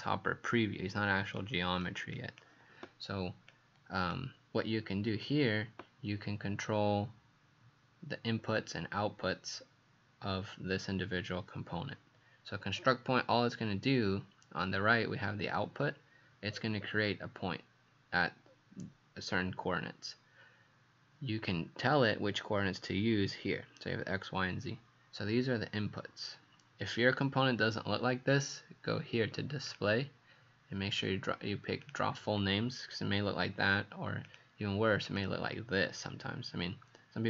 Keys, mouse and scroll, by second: 1.4 click.